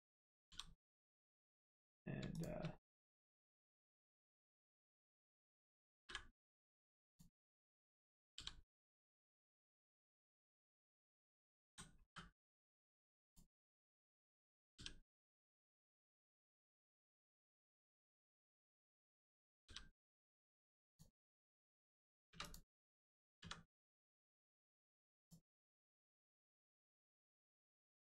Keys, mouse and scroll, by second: 0.5 g, 0.9 right click, 2.3 shift+click, 2.7 middle click, 3.0-3.8 scroll up 1, 3.8 middle click, 4.8 click, 6.0 m, 7.1 click, 8.3 g, 8.8 right click, 9.3 click, 9.6 middle click, 11.6 a, 12.0 m, 13.2 click, 14.7 g, 15.1 right click, 15.7 middle click, 16.3 shift+middle click, 16.9 middle click, 17.9 click, 19.6 g, 20.3 right click, 20.9 click, 21.1 scroll down 1, 21.4 middle click, 22.3 3, 22.4 click, 25.1 click, 25.6 middle click, 27.0 click, 27.3 middle click.